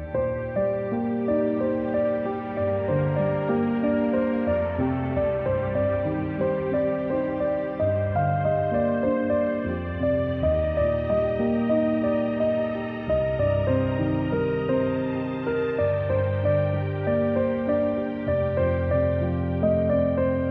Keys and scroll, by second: 1.3-2.1 space, 2.7 v, 4.0 g, 10.7 v, 11.4 z, 13.5 space, 14.1 a, 16.2 typing.